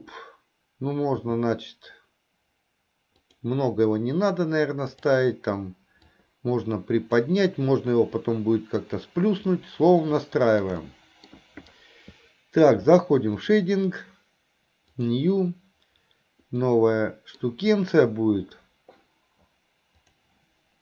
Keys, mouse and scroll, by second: 1.3 s, 4.9 click, 6.2-7.4 drag, 10.3-10.8 shift+middle drag, 10.9-11.4 middle drag.